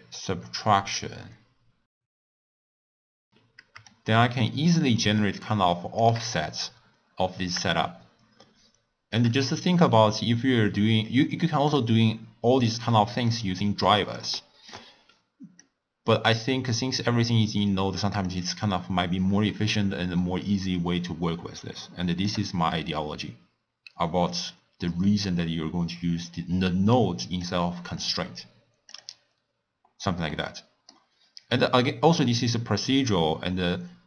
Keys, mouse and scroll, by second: 2.0 click, 3.0 middle click, 3.8-6.8 shift+drag, 7.7-10.7 shift+drag, 11.7 click, 13.3 click, 14.0 click, 15.5 click, 18.2-21.3 shift+drag, 24.5 click, 26.5-27.4 middle drag, 27.4 click, 28.8 click, 30.2-33.2 middle drag.